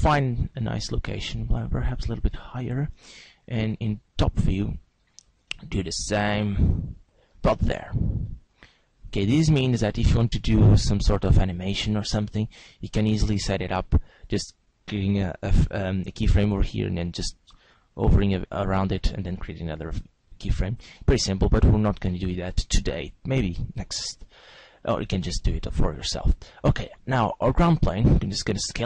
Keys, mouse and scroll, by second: 0.2 click, 1.5 g, 3.6 click, 3.9 click, 7.4 click, 7.4 g, 8.5 click, 10.2 g, 13.0 click, 16.9 g, 22.2 click, 23.2 right click, 28.2 s.